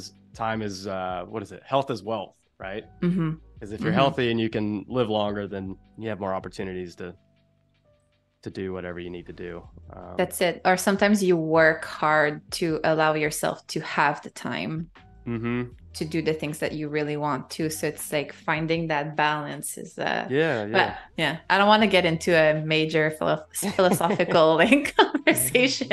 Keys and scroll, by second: 5.0 space, 8.1 super+z, 12.3 space, 13.8 z, 14.6 a, 16.1 =, 20.8 a, 22.6 super+z.